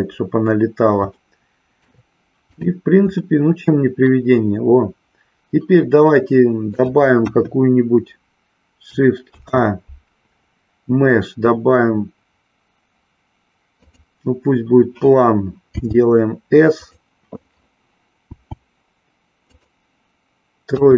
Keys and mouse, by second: 0.0 click, 0.0 KP_1, 1.1-2.0 shift+middle drag, 2.6 click, 3.2-6.8 middle drag, 7.2 KP_1, 9.2 shift+a, 16.3 s, 18.3 s, 19.5 click, 20.7 KP_3.